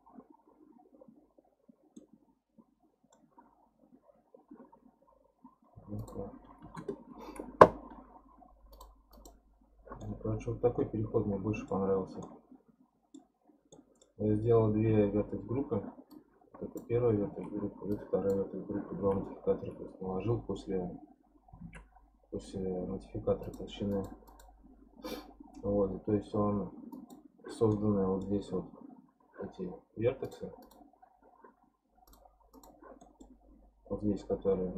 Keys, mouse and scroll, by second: 2.0-3.5 middle drag, 3.5-4.2 scroll up 1, 4.2-6.0 scroll up 2, 6.0-8.8 drag, 9.1 click, 10.0-13.3 middle drag, 13.3-13.7 scroll down 4, 13.7 middle click, 14.4 scroll up 1, 14.9 1, 16.1 click, 17.2 alt+z, 17.9 click, 18.9 alt+z, 21.6 alt+z, 23.4 click, 23.9 click, 24.3 click, 26.9 click, 27.7-30.2 middle drag, 30.2 click, 30.6 click, 32.1 click, 32.5 click, 33.0-34.7 middle drag.